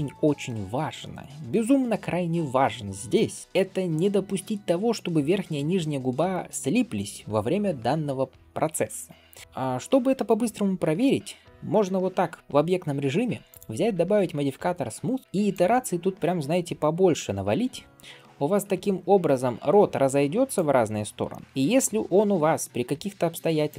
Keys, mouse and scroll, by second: 3.6-5.5 scroll up 2, 5.5 scroll down 1, 5.6 scroll down 1, 6.1 shift+middle click, 15.4-21.1 drag, 21.1 middle click, 21.4 Tab, 21.4-22.1 scroll up 1, 22.4-22.9 scroll up 3, 23.5 click.